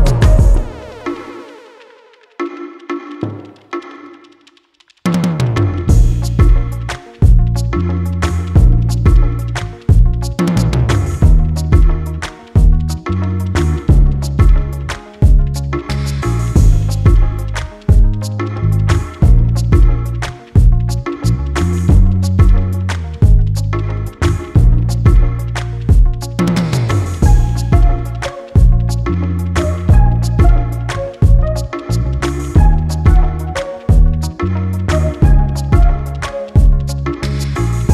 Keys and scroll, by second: 4.3 ctrl+shift+Return, 4.4 ctrl+shift+], 12.9 ctrl+z.